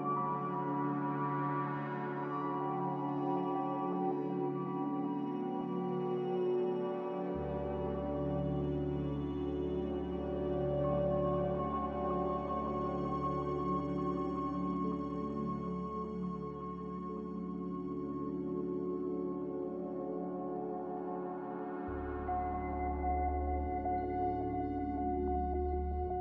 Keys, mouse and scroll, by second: 2.6 ctrl+z, 2.8 ctrl+z, 13.0 ctrl+b, 19.1 ctrl+z, 24.4 ctrl+z.